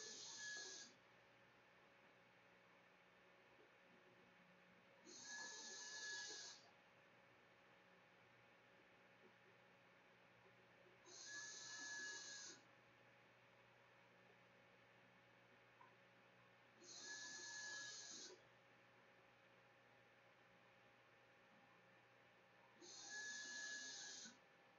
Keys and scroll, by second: 9.0-10.3 typing, 11.7-13.1 typing, 14.1 ctrl+z, 14.3 ctrl+s, 15.8 a.